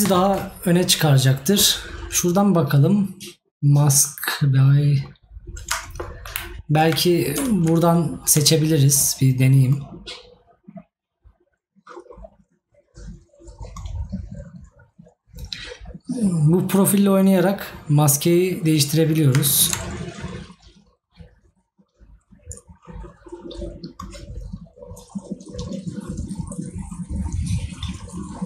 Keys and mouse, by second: 6.2 right click.